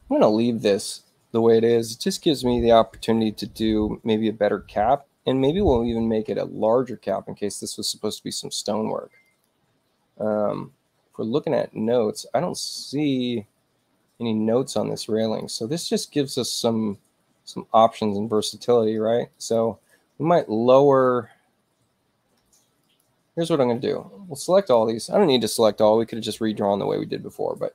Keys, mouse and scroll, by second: 6.9 click, 9.2 ctrl+click, 15.2 ctrl+click, 18.4 click, 19.3 ctrl+click, 22.8 ctrl+click, 24.6 click.